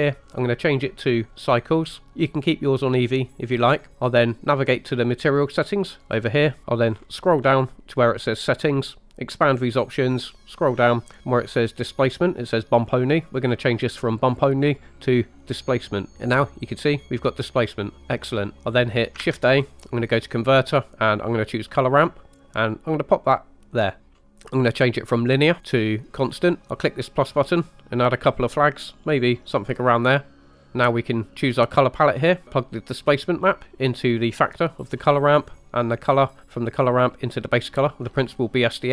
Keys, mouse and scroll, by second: 0.2-1.7 drag, 5.9 click, 6.6 scroll down 5, 6.8-9.1 scroll down 5, 9.3 click, 10.0-12.0 scroll down 6, 13.4-16.0 drag, 16.1-18.4 middle drag, 18.6 shift+a, 19.2 shift+a, 23.8 click, 24.0 middle click, 24.1 scroll up 2, 24.2 middle click, 25.3-26.4 drag, 27.2 click, 28.1 click, 29.2-29.8 drag, 30.3 click, 32.4 middle click, 33.0-34.9 drag, 35.9-38.0 drag.